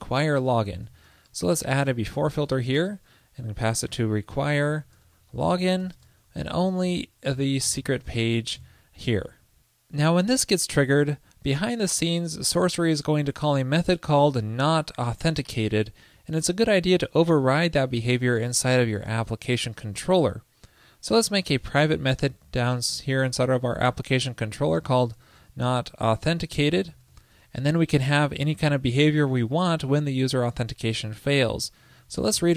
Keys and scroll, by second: 6.9 ctrl+l, 8.7 super+s.